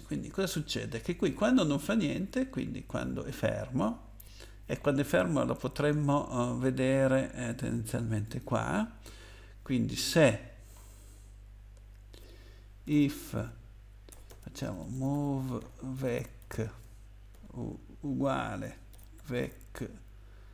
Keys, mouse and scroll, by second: 2.5-3.7 scroll down 1, 6.1-6.9 scroll down 1, 6.9-7.3 scroll down 1, 8.2 click, 9.2 Return, 10.0 Up, 10.7 scroll up 2, 12.8-17.3 typing, 18.5-19.4 typing.